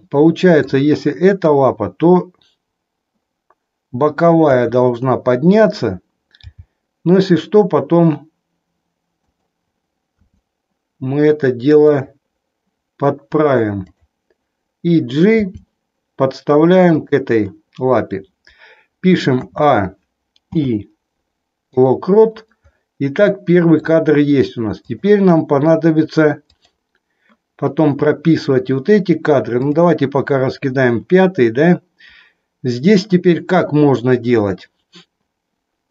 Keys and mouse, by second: 0.0-0.7 middle drag, 4.5 KP_3, 5.6 click, 6.6 g, 10.2 r, 15.5 g, 19.4 a, 20.5 i, 23.5 middle click, 24.8 click, 26.5 click, 29.7 click.